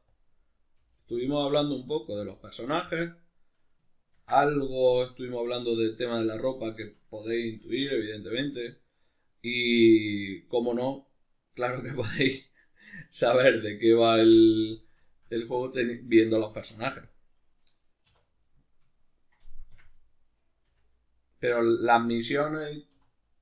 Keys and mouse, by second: 0.1 click, 0.3 middle click, 0.7 g, 1.2 click, 1.3 middle click, 1.9 g, 2.4 click, 2.5-4.2 middle drag, 4.2 ctrl+r, 5.6 click, 5.8-8.2 middle drag, 7.9 3, 8.2 right click, 8.6 shift+right click, 9.5-11.5 middle drag, 11.5 shift+right click, 12.6 right click, 13.9 shift+right click, 14.2 x, 15.0-16.2 shift+middle drag, 16.2 alt+right click, 16.6 x, 18.1 2, 18.4 right click, 19.1 shift+right click, 19.8 f, 20.3 right click, 20.7 f, 20.9-23.1 middle drag, 23.0 3, 23.1 right click.